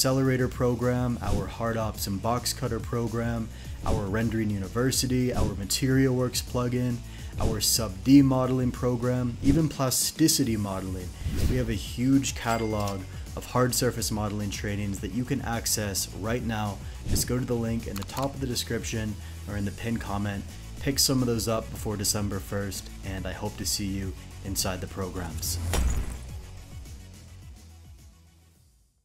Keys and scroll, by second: 0.3 g, 0.3 y, 0.6 Tab, 1.0 ctrl+KP_Subtract, 7.9 e, 7.9 y, 9.1 Tab, 9.2 i.